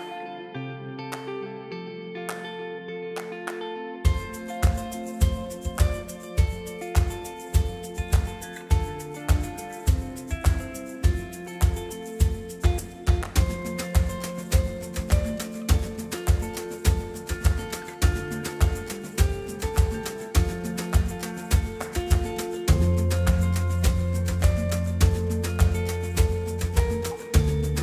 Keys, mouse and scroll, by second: 0.1 middle click, 1.2 Tab, 3.4-4.5 middle drag, 5.3-10.6 middle drag, 11.7-13.3 middle drag, 14.1 a, 14.8-16.6 middle drag, 14.8 a, 16.3 a, 16.6 a, 22.7-24.9 drag, 24.1 a, 24.5 a, 24.9 a, 25.9-27.8 middle drag.